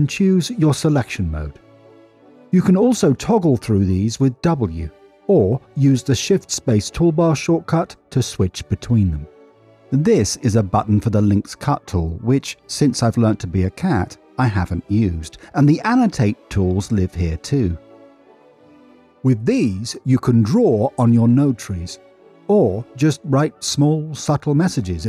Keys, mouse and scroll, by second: 0.2-6.1 drag, 19.8 n, 20.1 middle click, 20.7 middle click, 21.9-24.4 click, 22.1 click, 22.6 click, 22.7 click, 23.1 click, 23.2 click, 23.7 click, 24.3 click, 24.6 click, 24.8 click.